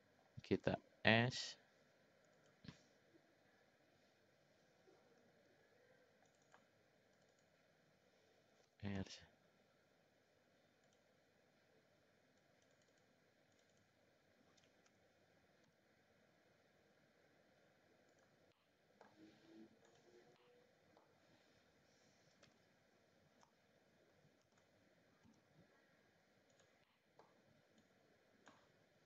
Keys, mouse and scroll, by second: 0.7 s, 5.2 ctrl+r, 7.1 click, 7.3 click, 8.6 r, 12.4 click, 12.7 click, 13.5 click, 14.9 r, 18.5 middle click, 19.9 click, 20.4 middle click, 22.5 l, 24.4 shift+d, 26.9 middle click, 27.8 click.